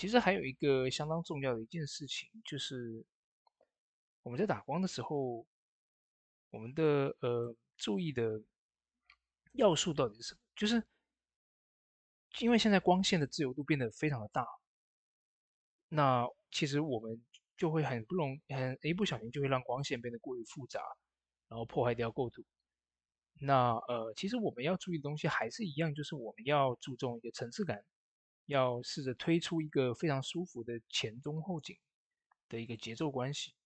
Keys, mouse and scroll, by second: 1.3 click, 6.1 click, 6.1-9.5 drag, 10.1 click, 17.3 click, 20.6 typing, 24.5 click, 24.5 typing, 24.5-30.2 drag, 26.1-26.8 typing, 28.7 typing, 30.2 v, 30.5 ctrl+click, 31.6 v, 32.5 ctrl+click.